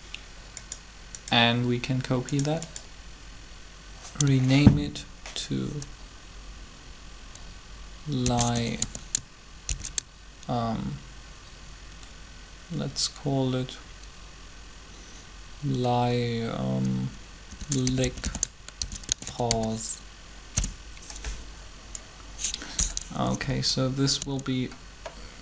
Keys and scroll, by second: 8.0-8.6 typing, 9.6 shift+-, 17.3-19.5 typing, 20.4 Return, 23.2 Up, 23.3 Up, 24.2 Down.